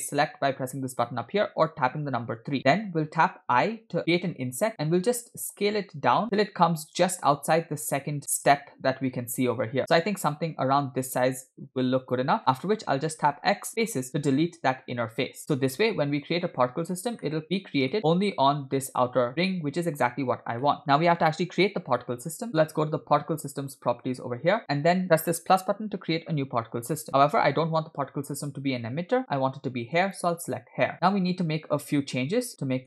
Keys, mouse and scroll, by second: 3.6 3, 3.9 i, 13.1 x, 16.2 Tab, 17.3 middle click, 20.7 middle click, 23.4-25.0 drag, 25.4 click, 30.1 click, 31.0-32.8 middle drag.